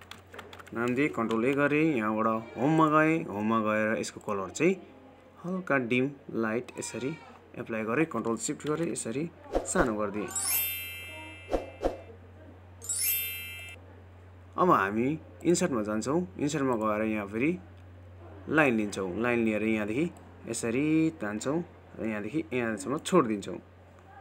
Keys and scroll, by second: 2.4 ctrl+a.